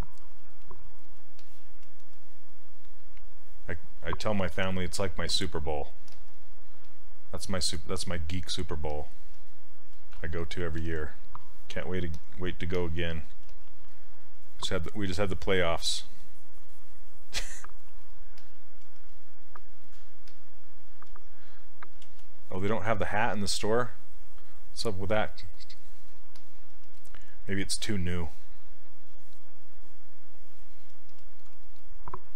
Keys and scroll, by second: 6.1 s, 13.5 s, 22.1 ctrl+z.